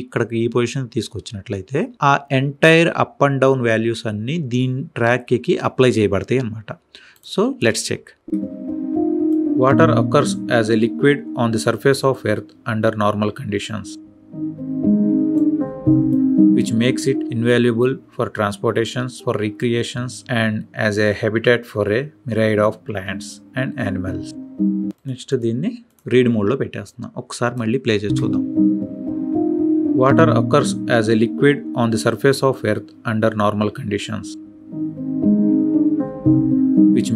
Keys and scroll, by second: 8.1 space, 27.9 space.